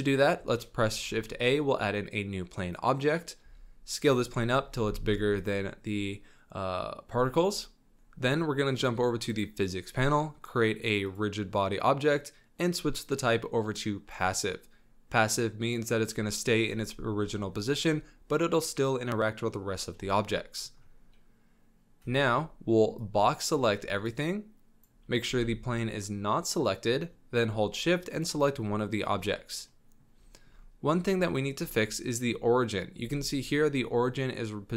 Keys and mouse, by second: 0.9 shift+a, 3.4 s, 4.5 click, 4.6 s, 5.8 click, 6.1 middle drag, 6.4 drag, 6.5 middle drag, 6.7-7.4 drag, 9.3 click, 20.4 click, 22.0 z, 24.2-24.9 drag, 25.2 b, 28.1 shift+click, 29.7-30.0 drag, 30.3 shift+middle click, 31.2 shift+middle drag, 33.0 z.